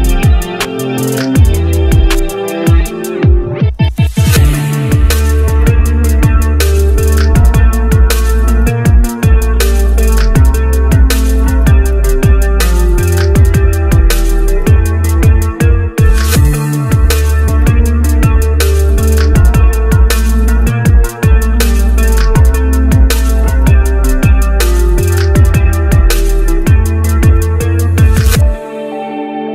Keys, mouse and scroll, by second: 12.5 Delete, 16.1 right click, 21.5 shift+Page_Down.